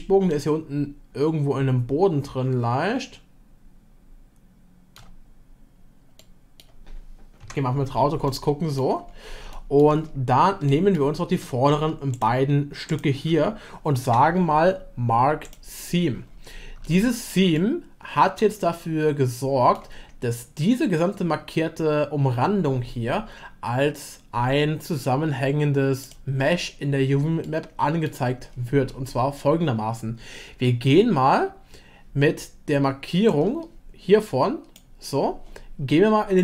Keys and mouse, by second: 0.3-5.0 shift+middle drag, 6.1 middle click, 8.2-8.8 shift+middle drag, 9.5-9.8 shift+middle drag, 10.6 shift+middle click, 12.1 ctrl+click, 14.0 u, 16.9 shift+middle click, 17.6-21.5 middle drag, 26.0 click, 27.4 middle click, 33.3-34.8 drag.